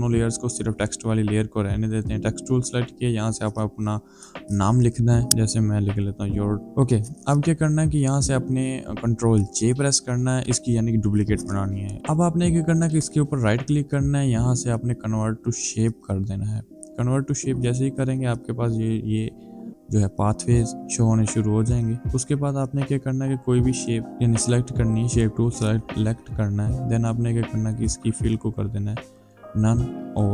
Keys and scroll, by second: 3.6 ctrl+a, 4.9-6.7 typing, 9.4 ctrl+j.